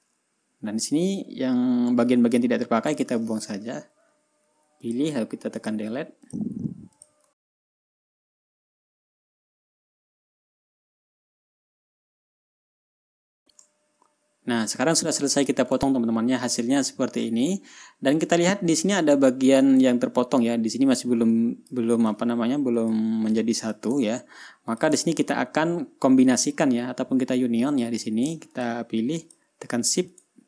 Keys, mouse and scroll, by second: 0.1 drag, 0.8-1.7 ctrl+scroll up 2, 2.2-3.0 ctrl+scroll down 1, 3.0 scroll down 1, 3.3 click, 4.9 Delete, 5.3 click, 5.6 Delete, 6.1 click, 6.4 Delete, 6.7 click, 7.3 click, 7.5 click, 7.7 click, 7.9 ctrl+scroll up 1, 8.0 ctrl+click, 8.1 click, 8.4 Delete, 8.4 click, 8.5 click, 8.7 click, 8.8 click, 8.9 Delete, 9.2 ctrl+click, 9.4 click, 9.5 Delete, 9.5 drag, 9.7 click, 9.9 Delete, 9.9 click, 10.0 Delete, 10.4 click, 10.4 Delete, 10.5 drag, 10.6 Delete, 10.9 ctrl+y, 11.1 click, 11.3 click, 11.4 Delete, 11.6 Delete, 11.6 click, 11.8 click, 12.0 Delete, 12.2 drag, 12.3 Delete, 12.3 drag, 12.4 Delete, 12.5 click, 12.6 Delete, 12.7 click, 12.7 Delete, 12.9 ctrl+scroll up 1, 13.0 ctrl+click, 13.5 Delete, 14.2-14.8 ctrl+scroll down 4, 16.4 ctrl+scroll down 2, 17.0 ctrl+scroll up 2, 18.0 ctrl+scroll up 2, 20.4 ctrl+scroll up 1, 20.9 ctrl+scroll down 2, 21.4 ctrl+click, 21.8-22.4 ctrl+drag, 22.6 ctrl+y, 23.3 click, 23.9-24.4 drag, 24.5 ctrl+y, 25.2 ctrl+click, 25.5-25.9 ctrl+scroll down 2, 25.9 ctrl+scroll up 2, 28.2 ctrl+click, 29.1 shift+click, 29.7 shift+click.